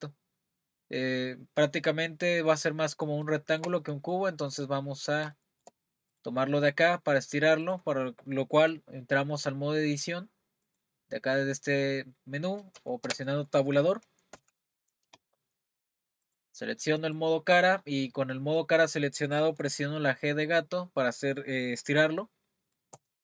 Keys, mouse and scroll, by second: 0.5-1.7 scroll up 2, 3.0 scroll up 1, 3.3-4.9 shift+middle drag, 4.9-5.3 scroll up 3, 5.3-6.1 shift+middle drag, 6.1 click, 6.7-7.6 middle drag, 7.6 click, 10.6-13.0 drag, 13.0 Escape, 14.5 Tab, 16.3 click, 17.0 click, 18.3-21.4 middle drag, 22.9 g.